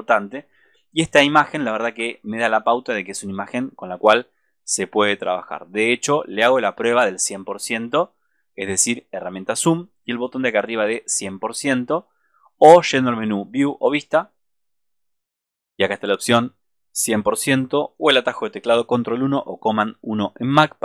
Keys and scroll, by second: 2.2 super+-.